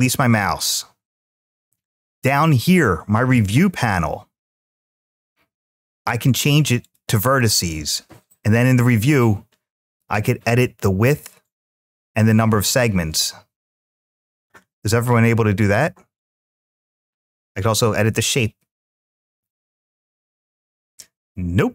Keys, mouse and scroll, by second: 0.1 click, 3.3 click, 6.6 click, 8.3-10.9 drag, 11.6-14.6 drag, 16.0-19.3 drag.